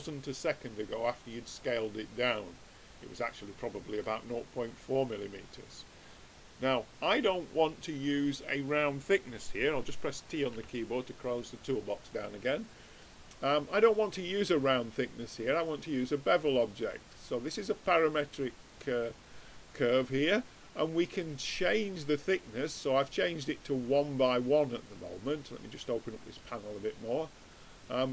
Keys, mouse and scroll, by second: 4.6-10.5 middle drag, 10.5 t, 14.4-15.8 middle drag, 15.8-17.4 right drag, 17.4 click, 18.6-25.2 middle drag, 25.2-28.1 drag.